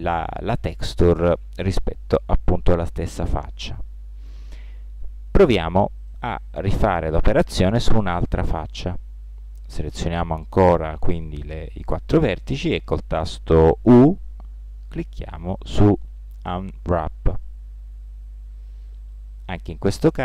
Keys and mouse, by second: 5.5-6.8 drag, 7.8 right click, 8.7 middle click, 13.8 u.